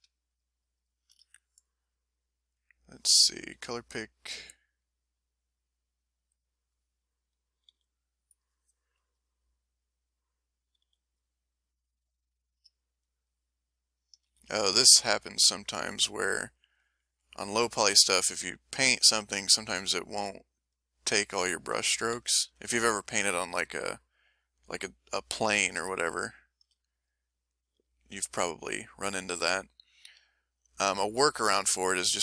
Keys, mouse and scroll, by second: 3.3 s, 4.4 click, 5.4-6.7 drag, 7.7 f, 8.3 click, 9.0 KP_1, 10.8 f, 11.1 click, 11.5 click, 13.0 click, 14.2 ctrl+z, 14.6 ctrl+z, 15.2 ctrl+click, 16.2-17.7 ctrl+drag, 18.9 click, 22.0 ctrl+z, 24.0 KP_1, 26.1 shift+middle click, 27.2 ctrl+shift+middle click, 28.8 ctrl+middle click, 30.5 click, 32.1 click.